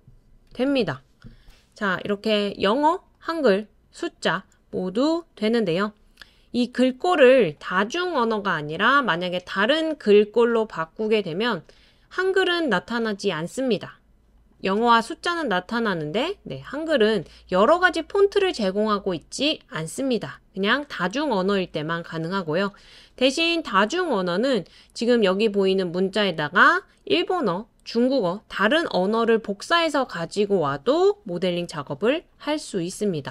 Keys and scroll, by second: 0.0-1.3 typing, 29.6-30.8 typing, 32.3 typing.